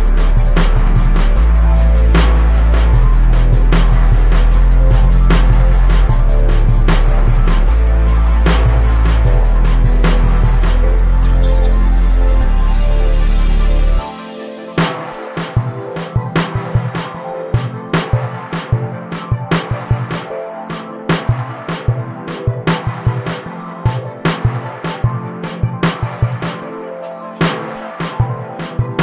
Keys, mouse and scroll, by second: 1.4 z, 4.0-20.4 drag, 20.4 KP_0, 20.9 scroll down 1, 22.3 click, 22.8 Tab, 23.4-24.2 drag, 24.2 scroll up 1, 24.5-25.3 scroll down 1, 28.4 scroll down 1.